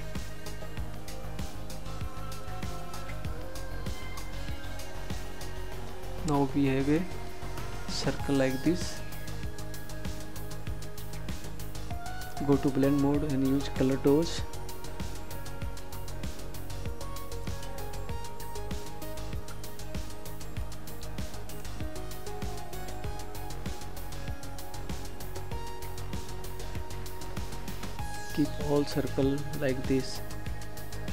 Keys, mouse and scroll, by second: 3.5 click, 10.2 click, 21.8 ctrl+z, 26.1 click.